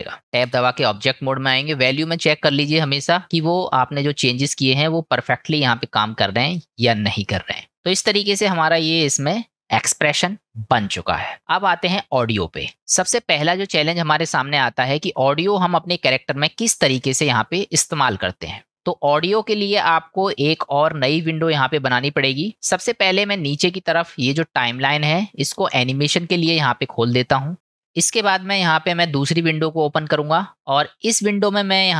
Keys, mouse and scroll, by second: 0.5 Tab, 3.7-7.7 drag, 8.5-9.7 middle drag, 11.4-11.9 middle drag, 14.6-15.1 shift+middle drag, 16.3-17.0 shift+middle drag, 17.6-20.7 middle drag, 26.0-27.5 drag, 27.9-30.7 drag.